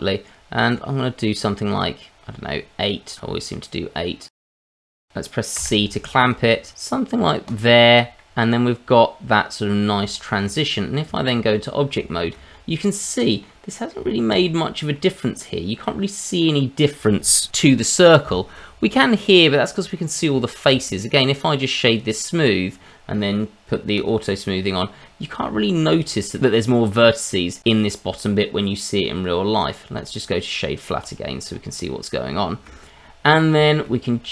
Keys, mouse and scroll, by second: 0.8-1.7 scroll up 4, 2.1-3.3 scroll up 3, 5.6 c, 7.5 click, 7.7-8.0 scroll down 2, 8.2 middle click, 10.1 shift+middle click, 10.6 middle click, 11.0 Tab, 12.1 middle click, 12.5-12.8 scroll up 2, 12.8 middle click, 13.7 middle click, 14.1 middle click, 14.4 middle click, 15.8 middle click, 18.5 middle click, 19.5 middle click, 20.4 shift+middle click, 21.1 right click, 23.9 click, 24.6-25.0 scroll down 1, 25.0 middle click, 25.6 shift+middle click, 26.0 scroll up 1, 26.3 middle click, 30.0 right click, 31.5-31.9 scroll up 1, 31.9 middle click, 32.3 shift+middle click, 32.9 scroll up 2, 33.2 middle click, 33.6 middle click, 34.2 middle click.